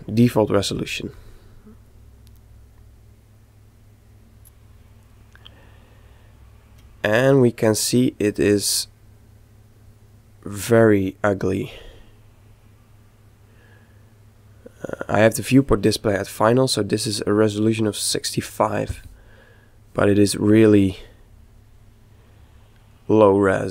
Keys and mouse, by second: 0.6 click, 5.2-7.5 middle drag, 7.1 z, 7.6-9.4 middle drag, 12.1-14.0 middle drag, 20.5 click.